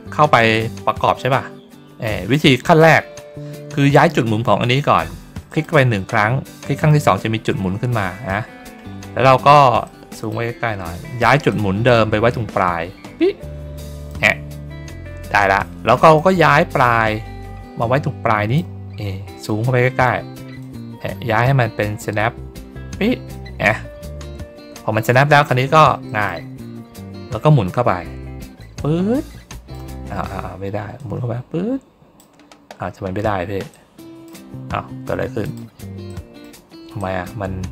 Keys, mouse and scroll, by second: 0.4-2.2 drag, 5.4 click, 9.0 ctrl+middle click, 9.7 middle click, 11.4-14.0 drag, 14.6 ctrl+middle click, 16.1-18.5 drag, 18.8 ctrl+middle click, 19.1 ctrl+middle click, 19.5 ctrl+middle click, 20.5-23.2 drag, 24.8 ctrl+middle click, 25.2 ctrl+middle click, 26.0 middle click, 26.2-26.7 ctrl+scroll down 1, 28.5-29.6 drag, 30.9-32.1 drag, 33.6 click, 35.3 click, 36.0 middle click, 36.9-37.7 drag.